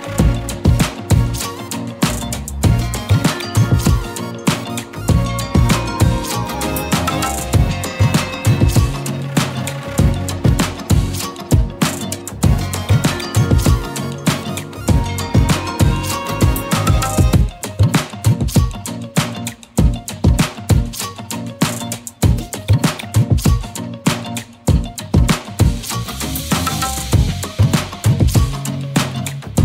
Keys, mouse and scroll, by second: 1.7 shift+click, 3.7 ctrl+l, 7.6 middle click, 8.1-8.5 scroll up 1, 8.5 click, 8.9 click, 9.6 KP_Divide, 10.5 middle click, 11.1-11.5 scroll up 3, 11.5 shift+middle click, 11.7 click, 14.0 click, 14.8-16.8 middle drag, 16.8 alt+click, 17.5-18.0 scroll down 6, 18.0-19.6 middle drag, 19.6 scroll up 2, 20.3-22.3 shift+middle drag, 22.3 n, 23.5 click, 27.7-29.6 middle drag.